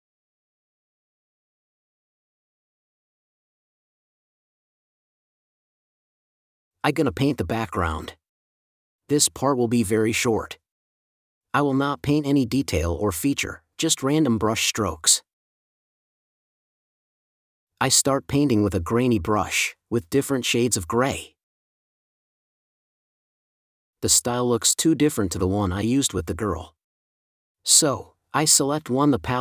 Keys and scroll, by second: 4.1 space, 4.6 super+space, 7.9 space, 10.9 4, 12.2 5, 13.3 space, 14.7 super+s, 16.0 shift+super+n, 18.5 super+z, 19.1 super+z, 25.7 space.